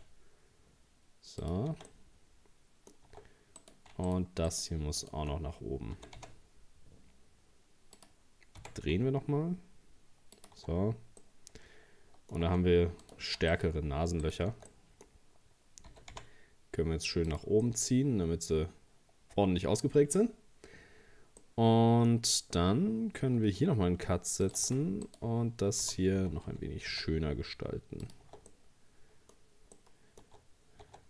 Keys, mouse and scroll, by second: 1.7 Tab, 1.9-3.1 middle drag, 3.1 Tab, 3.6 right click, 4.1 shift+right click, 4.5 shift+right click, 5.0 shift+right click, 6.0 g, 8.6 r, 10.6 Tab, 10.9-11.2 scroll down 3, 11.2-12.5 middle drag, 12.5 Tab, 13.0 right click, 13.5 alt+shift+right click, 14.2 alt+shift+right click, 14.7-15.9 middle drag, 15.9 g, 17.7-20.7 middle drag, 21.4 middle click, 22.1-22.8 scroll up 1, 24.1 ctrl+r, 25.1 right click, 25.8 g, 28.2 Tab, 28.5 middle click, 29.4-29.8 scroll up 2, 29.8-30.8 middle drag, 30.8 Tab.